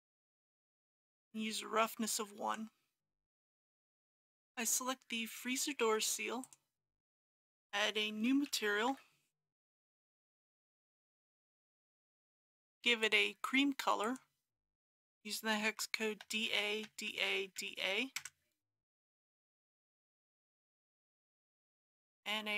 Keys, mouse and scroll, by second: 1.6-3.0 drag, 8.1-8.9 typing, 13.0 click, 16.3-17.6 typing.